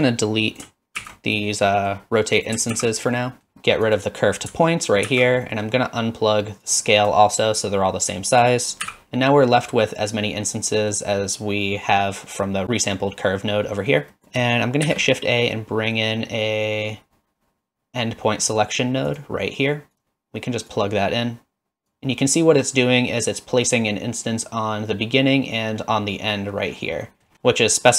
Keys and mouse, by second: 1.0 ctrl+x, 1.8 middle click, 2.7 ctrl+x, 3.2 middle drag, 3.5 x, 3.9 click, 5.1 ctrl+x, 5.5 middle click, 6.7-7.1 drag, 8.5 click, 8.9 x, 10.4 middle click, 13.8 middle click, 14.1 middle click, 14.2 click, 14.9 shift+a, 20.8-21.9 drag, 27.2 middle click, 27.3 middle click.